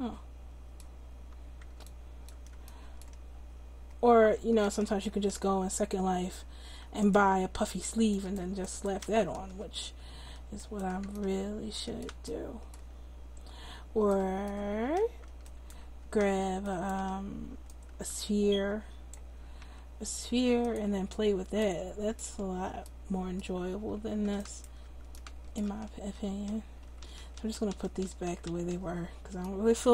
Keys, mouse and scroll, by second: 4.4 Tab, 17.6 middle click, 18.4-19.6 drag, 19.6 s, 23.3-25.5 middle drag, 25.7 ctrl+z, 26.1 ctrl+z, 26.5 ctrl+z, 26.8 ctrl+z, 27.0 ctrl+z, 27.2 ctrl+z, 27.3 ctrl+z, 27.5 ctrl+z, 27.7 ctrl+z, 28.0 ctrl+z, 28.2 ctrl+z, 28.5 ctrl+z.